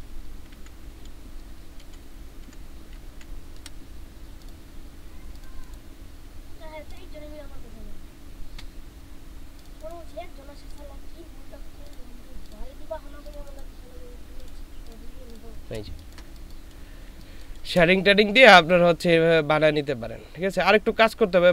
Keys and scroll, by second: 0.5 ctrl+], 1.8 ctrl+[, 2.4 ctrl+[, 3.1 ctrl+], 15.9 ctrl+space, 16.7 ctrl+space.